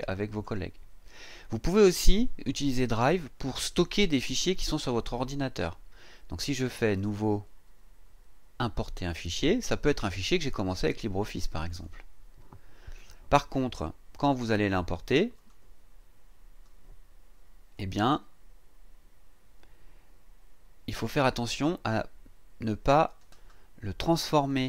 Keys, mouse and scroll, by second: 6.9 click, 11.7 click, 15.3 click, 17.7-23.4 drag, 24.4 click.